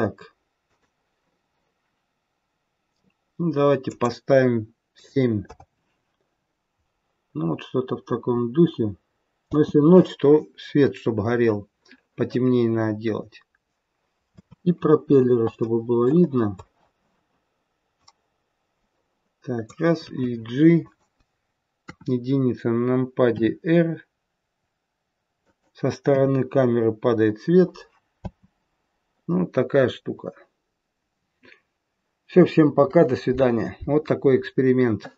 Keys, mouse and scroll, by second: 0.6 click, 3.8 click, 7.1-8.8 scroll up 1, 8.8-9.5 scroll up 1, 9.5-11.9 scroll up 1, 9.5 space, 14.4 space, 14.7-15.8 scroll down 6, 15.6 middle click, 16.2-17.8 scroll down 2, 17.9 click, 20.0 g, 21.8 KP_1, 23.3 r, 26.1 KP_0, 27.2-28.2 scroll up 5, 28.2 space, 30.1-31.1 scroll up 2.